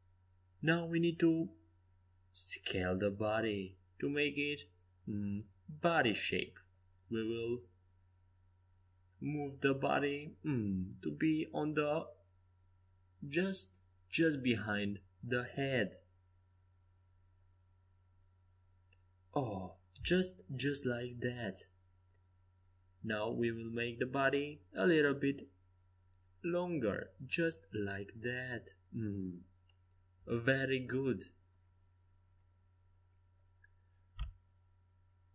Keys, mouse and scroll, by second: 0.1 s, 1.3-3.3 right drag, 2.2 Tab, 3.0 click, 3.1 Tab, 3.7-7.0 middle drag, 4.0 Tab, 5.2 s, 9.8-11.7 drag, 11.9 s, 15.1 click, 15.1 right click, 19.8-22.0 drag, 23.5 s, 29.0-31.0 drag, 33.7-35.3 middle drag.